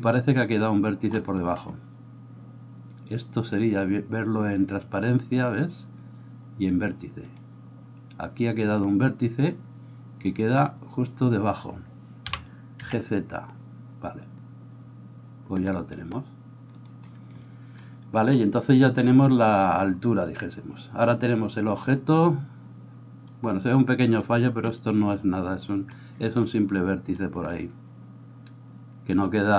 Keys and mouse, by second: 7.3-10.6 drag, 8.6 right click, 10.6-18.9 middle drag, 12.2 g, 18.9-29.5 drag.